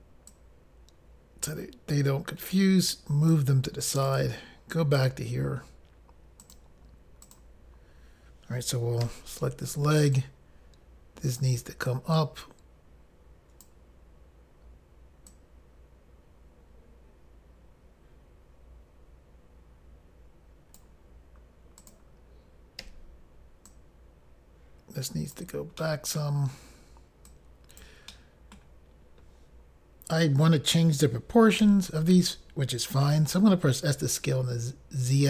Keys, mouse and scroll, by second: 0.4 click, 4.1 click, 4.3 click, 6.5 click, 6.6 click, 7.3 click, 7.4 click, 10.2 click, 10.2 i, 12.2 click, 15.4 click, 21.9 click, 22.0 click, 22.9 i, 23.8 click, 25.9 middle click, 27.4 click, 28.2 middle click, 34.1 s, 34.1 z.